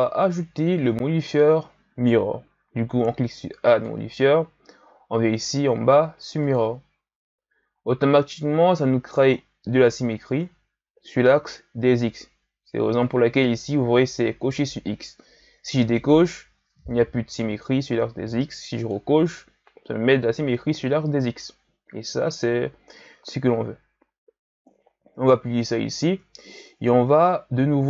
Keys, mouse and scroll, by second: 6.5 click, 9.4-10.2 ctrl+scroll down 1, 10.2-12.3 ctrl+scroll down 2, 15.8 click, 18.8 click, 25.4-26.4 drag, 26.4-27.6 ctrl+scroll up 3, 27.6-27.8 scroll up 1.